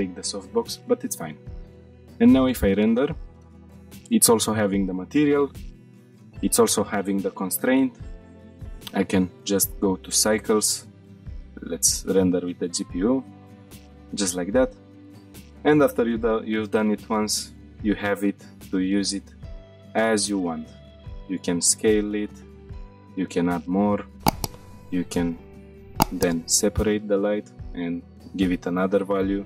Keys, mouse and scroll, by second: 3.2 click, 3.7 middle click, 4.4-4.9 middle drag, 5.0 shift+middle click, 5.8 click, 6.3 g, 7.9 right click, 8.7-10.5 drag, 11.1 shift+middle click, 11.3-12.8 drag, 13.1-13.4 shift+middle drag, 13.6 middle drag, 13.9 shift+middle click, 14.2-14.6 middle drag, 14.8 scroll down 1, 18.1 g, 19.3 click, 20.0-20.5 drag, 21.3 s, 21.9 click, 22.3-23.0 scroll down 3, 23.0 shift+d, 24.0 click, 24.4 click, 25.1 click, 26.3 click, 26.9-27.9 scroll down 2, 27.9 click, 29.3 shift+click.